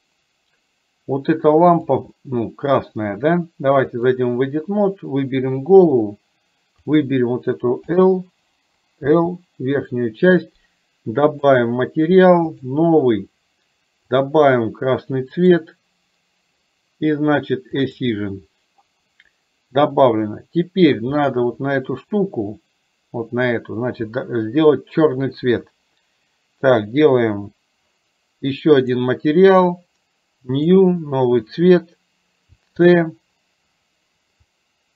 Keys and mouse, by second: 1.8 click, 2.2 middle click, 4.2-6.1 drag, 6.9 click, 12.6-12.9 drag, 14.1 click, 17.8 click, 20.1 middle click, 28.8 click, 30.7 click.